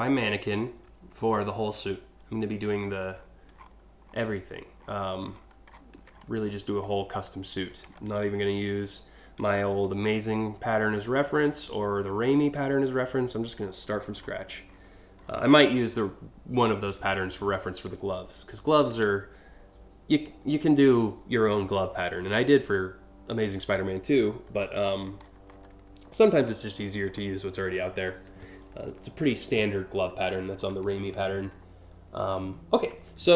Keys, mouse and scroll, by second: 2.7-3.3 scroll down 2, 3.7 alt+scroll down 1, 4.5 scroll down 1, 5.0-5.5 ctrl+scroll down 2, 5.7-6.2 scroll up 2, 7.5 alt+scroll up 2, 10.9 click, 12.0 click, 12.5 alt+scroll down 6, 13.2 scroll down 1, 13.8 scroll down 1, 14.3 scroll up 1, 21.4 scroll down 1, 22.3 scroll down 1, 23.4-24.5 scroll down 4, 24.6-25.2 scroll up 3, 25.7 ctrl+scroll down 1, 26.3 scroll up 1, 26.8 scroll down 2, 29.5 alt+scroll up 1, 30.2 scroll down 2, 30.5 scroll up 2, 31.2 alt+scroll down 2, 32.4 alt+scroll down 1.